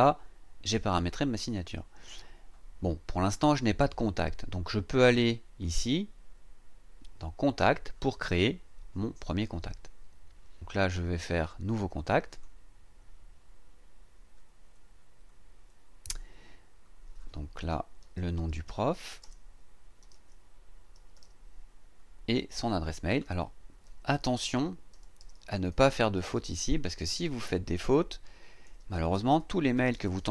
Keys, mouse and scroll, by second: 5.6 click, 7.6 click, 12.3 click, 17.8-21.7 typing, 22.5 click, 23.1 click, 23.6-27.7 typing, 29.1-30.3 typing.